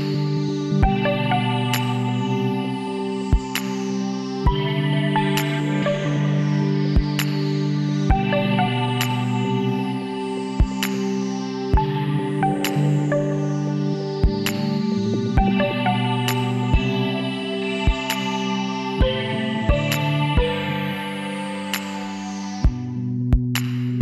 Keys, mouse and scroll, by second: 4.1-6.7 middle drag, 7.4-11.8 middle drag, 11.8 b, 15.8 c, 21.1 click, 21.5-24.0 middle drag.